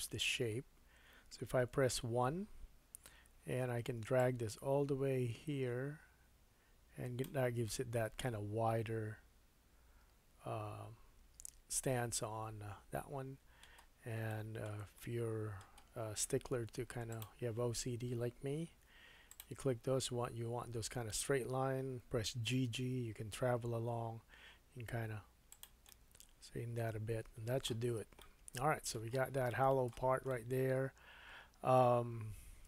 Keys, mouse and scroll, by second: 1.5 KP_1, 4.2-11.0 drag, 7.6-10.7 middle drag, 14.3 shift+middle click, 15.0-17.2 drag, 15.0 middle click, 16.3 1, 17.2-19.3 middle drag, 19.3 shift+click, 19.4-32.6 shift+middle drag, 22.5 g, 27.9 scroll down 2.